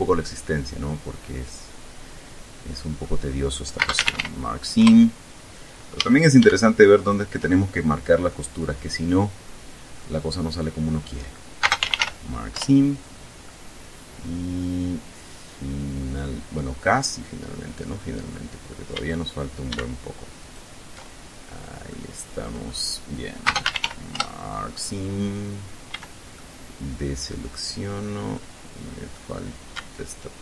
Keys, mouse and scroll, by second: 0.0-3.4 drag, 4.0 space, 4.1 a, 4.5 k, 5.0 Return, 6.1 a, 7.1 alt+shift+right click, 7.7-8.1 alt+shift+scroll down 2, 8.5-10.4 middle drag, 10.4-10.8 scroll up 2, 11.8-12.7 typing, 13.6-17.2 middle drag, 17.6 scroll up 1, 18.5 click, 19.1 a, 20.6 alt+shift+right click, 22.1 middle click, 23.6-24.6 typing, 25.8 scroll up 2, 26.1 a, 26.5-27.8 drag, 28.5-29.5 drag.